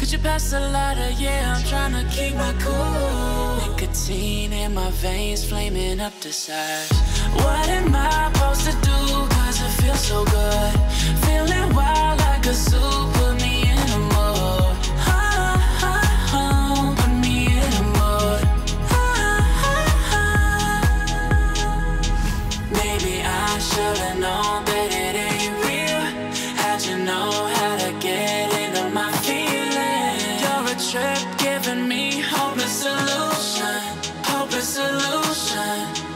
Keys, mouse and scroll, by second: 0.2 click, 2.8 click, 3.5 Delete, 4.4 click, 6.2-7.5 drag, 9.6 click, 13.3 click, 16.0-16.7 click, 17.0 ctrl+z, 17.8-18.4 drag, 19.2 alt+scroll down 1, 20.1-21.2 drag, 25.4 alt+scroll up 1, 26.2-28.6 drag, 29.1-30.1 drag, 31.8 click, 33.2 alt+scroll up 1, 33.9 alt+scroll down 1, 34.6 click, 35.6 ctrl+a.